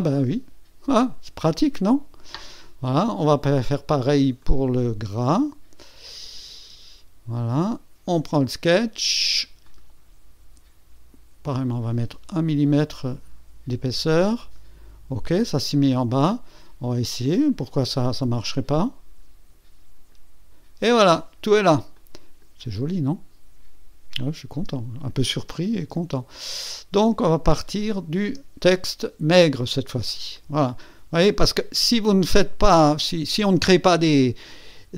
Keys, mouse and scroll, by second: 0.3-2.0 drag, 4.4 click, 5.1 space, 6.1 click, 6.5 space, 8.1 click, 9.6 click, 12.4 KP_1, 14.4 click, 17.5-20.3 drag, 21.9-22.6 drag, 24.2 click, 24.6 space, 25.4 space, 26.5 space, 27.8 click, 28.3 space, 29.6-30.2 drag, 30.3 KP_1, 30.9 KP_2.